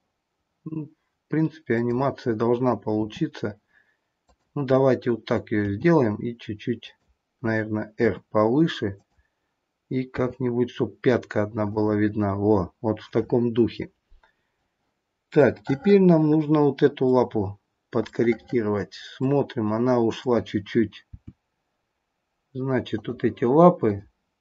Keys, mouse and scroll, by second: 2.9 r, 5.5 g, 7.9 r, 10.2 g, 15.4 middle click, 17.3-18.1 scroll up 1, 18.1 middle click, 20.0 click, 21.2 g, 23.8 click.